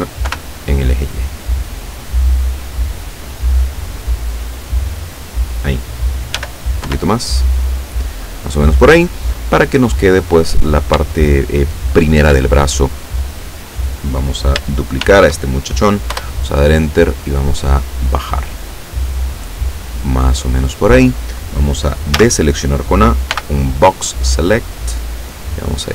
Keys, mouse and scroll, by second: 0.3 y, 2.0 click, 2.7-5.6 drag, 6.4 s, 6.9 y, 7.7 click, 11.2-12.4 shift+drag, 15.1 shift+d, 16.2 Return, 17.1-20.7 drag, 22.2 a, 23.3 b, 24.1 click, 25.5-25.9 drag.